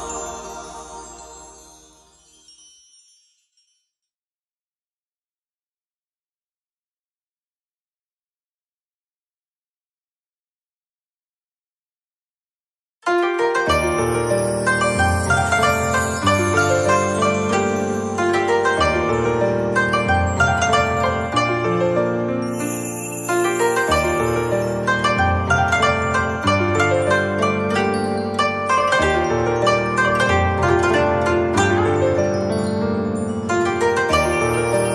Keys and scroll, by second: 19.0 z, 19.7 space.